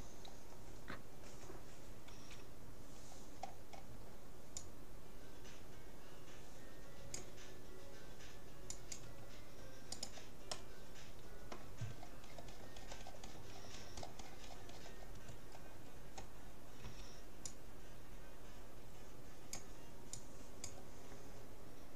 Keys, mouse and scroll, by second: 2.2 c, 10.6-12.2 middle drag, 12.2 scroll up 1, 12.4 scroll down 1, 15.6 scroll down 1, 15.8-17.6 middle drag, 16.8 c.